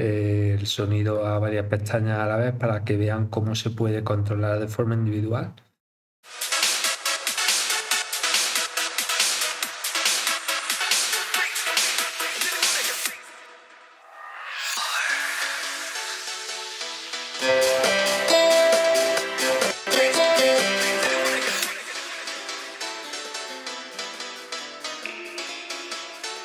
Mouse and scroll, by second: 1.3 scroll down 4, 5.7 click, 8.5 scroll down 4, 11.5 click, 12.7-13.2 scroll down 7, 14.1 click, 19.0 click, 21.0 click, 24.7 scroll up 1.